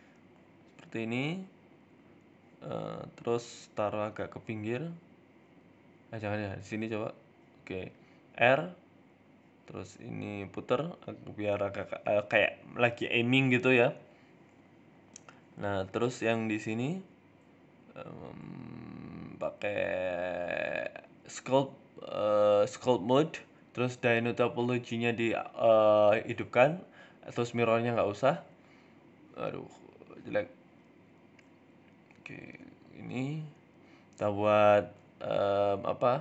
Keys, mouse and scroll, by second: 0.4 r, 1.4 middle click, 1.7-2.2 scroll down 7, 2.2 middle click, 3.8 g, 7.8 r, 9.7 right click, 10.0 r, 12.4-13.4 scroll up 2, 13.4 scroll up 4, 13.6 shift+middle click, 13.8-14.2 scroll down 4, 14.2 shift+middle click, 15.2 shift+middle click, 15.5 scroll down 2, 15.9 KP_7, 16.5 shift+middle click, 16.9 right click, 17.1 Tab, 17.4 shift+middle click, 17.6 Tab, 17.8 Tab, 18.8 click, 23.9 click, 24.6 click, 26.4 click, 27.0 click, 29.0 ctrl+z, 29.3 middle click, 29.8 scroll up 2, 30.0 shift+middle click, 30.4 click, 31.2 middle click, 31.7 middle click, 32.1 shift+middle click, 32.9 ctrl+z, 33.1 click, 34.3 middle click, 35.3 ctrl+z, 35.3 click, 35.5 ctrl+z, 35.7 middle click, 36.0 shift+middle click.